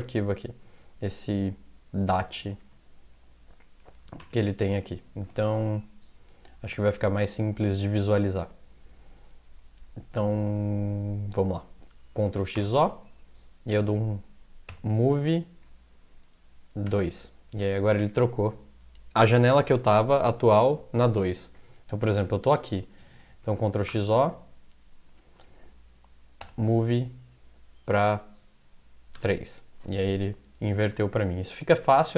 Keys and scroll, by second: 4.2 -, 12.3 ctrl+x, 12.6 o, 14.5-15.2 typing, 16.9 typing, 23.6 ctrl+x, 23.9 o, 26.4 m, 29.2 3, 31.1 alt+Tab.